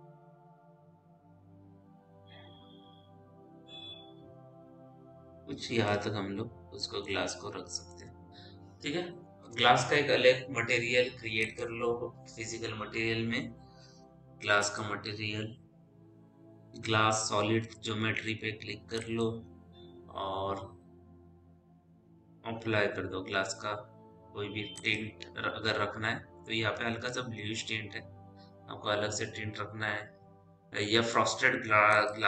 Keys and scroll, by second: 9.3 m.